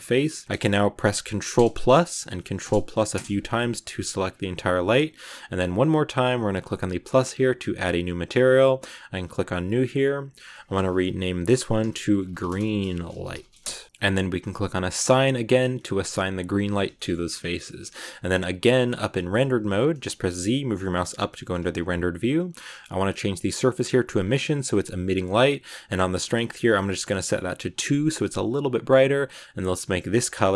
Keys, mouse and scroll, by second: 1.5 ctrl+KP_Add, 2.5 ctrl+KP_Add, 3.0 ctrl+KP_Add, 5.2-5.8 scroll up 3, 6.9-12.2 drag, 12.2 e, 15.0-16.8 drag, 16.8 middle click, 17.2 Tab, 17.2-17.6 scroll down 3, 17.6 z, 18.7-20.2 middle drag, 20.2 z, 21.0 z, 23.0-24.7 drag, 24.7-26.1 scroll down 4, 26.1-27.7 drag, 28.2-29.2 scroll down 1, 29.2 click.